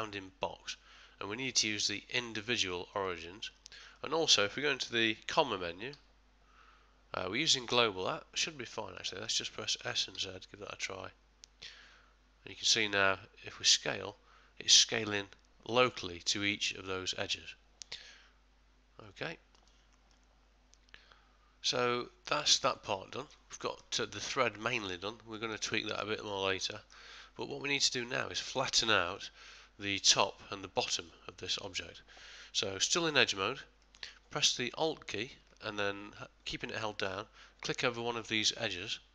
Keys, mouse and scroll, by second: 4.0 middle click, 5.9 ,, 9.0 middle click, 9.8 s, 20.1 middle click, 22.7 ctrl+middle click, 23.1 shift+middle click, 23.6 ctrl+middle click, 24.0 shift+middle click, 24.6 shift+middle click, 25.3 middle click, 26.0 shift+middle click, 26.5 ctrl+middle click, 27.2 middle click, 29.9 middle click, 33.0 2, 33.8 middle click.